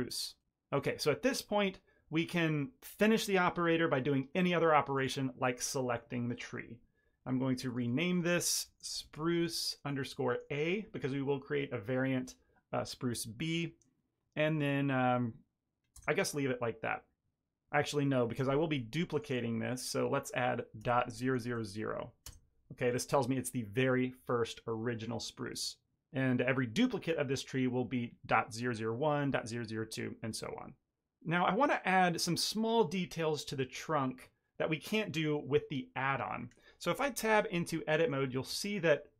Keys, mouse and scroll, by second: 4.9 click, 7.6 click, 19.1 click, 19.3 click, 21.3 0, 37.1 Tab, 37.8 ctrl+middle click, 38.3 shift+middle click, 38.5 ctrl+middle click.